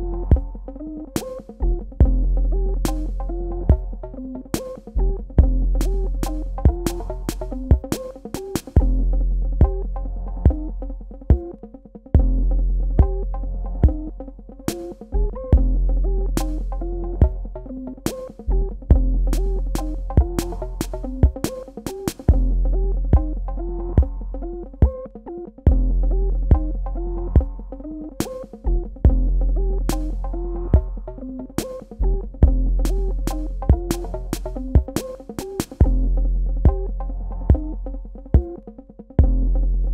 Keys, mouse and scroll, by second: 1.7 shift+click, 5.3 click, 13.2 click, 25.1 shift+click, 32.3 click, 36.6 Tab, 38.7 click.